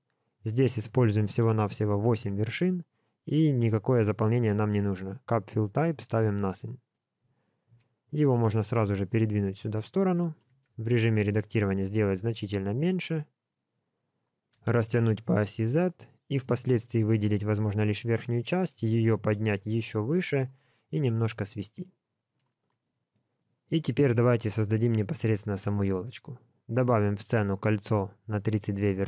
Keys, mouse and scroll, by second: 0.5 click, 3.3 click, 8.3 g, 10.5 Tab, 11.0 shift+middle click, 11.5 s, 16.9 alt+click, 17.5 scroll up 1, 18.8-19.3 scroll up 1, 18.8 g, 21.8 s, 26.0 shift+a.